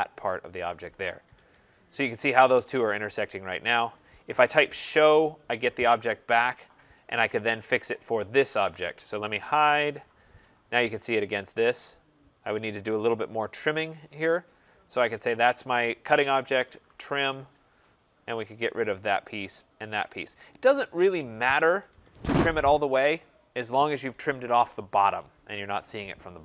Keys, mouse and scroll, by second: 0.1 click, 0.8 scroll, 1.0 Escape, 1.2 Escape, 1.6-2.0 scroll, 3.6 right click, 4.2-5.2 typing, 4.7 middle click, 7.6 typing, 7.9 click, 9.1-10.1 typing, 10.5-10.9 scroll, 11.1 Return, 11.1 middle click, 13.4 right click, 13.4-14.7 scroll, 15.0 click, 16.0-17.1 typing, 18.7 click, 19.9 click, 21.5 Escape, 21.8 Escape, 22.1-23.7 scroll.